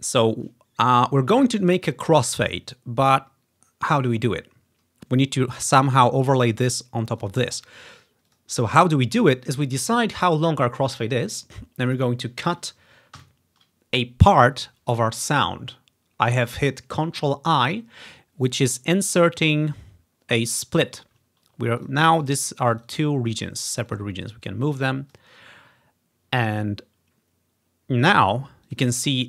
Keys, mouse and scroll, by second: 6.0 click, 7.2 click, 7.8 click, 8.3 click, 8.9-9.9 drag, 10.3 scroll up 1, 10.6-12.1 scroll down 2, 13.2 ctrl+i, 19.4-21.1 drag, 20.0-20.6 ctrl+scroll up 2, 21.4 ctrl+scroll down 2, 21.9-22.9 drag, 23.0-24.3 drag, 24.5 click, 28.7 click, 29.0 click.